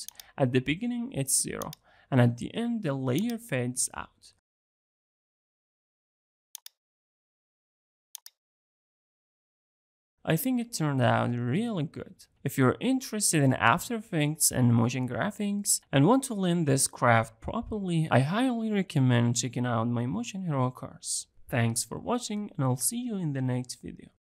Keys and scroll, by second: 5.0 alt+].